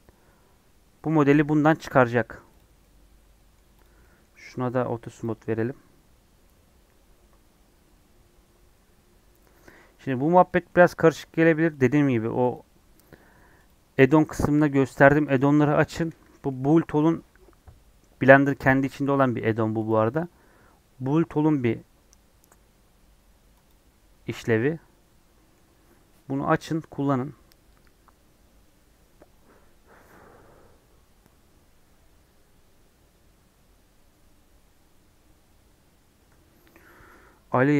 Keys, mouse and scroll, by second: 1.0-2.5 middle drag, 2.5 click, 2.7-3.8 middle drag, 3.8 click, 3.9-5.0 middle drag, 5.0 click, 5.5-8.5 middle drag, 10.4-12.5 middle drag, 12.5-15.8 drag, 24.2-37.7 middle drag.